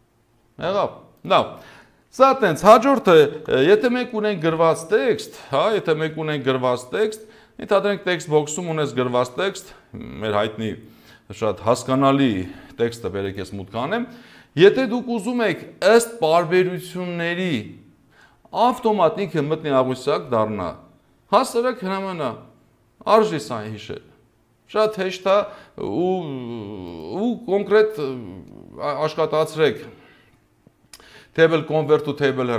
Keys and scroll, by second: 3.3 Delete.